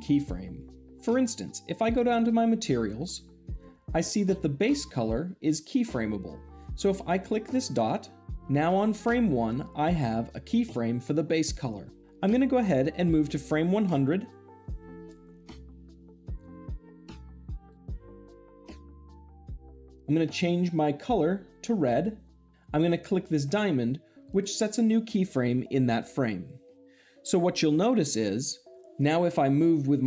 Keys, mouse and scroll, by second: 1.7 click, 12.8-13.9 drag, 17.5 click, 20.9-21.9 drag, 22.5 click, 24.1 click.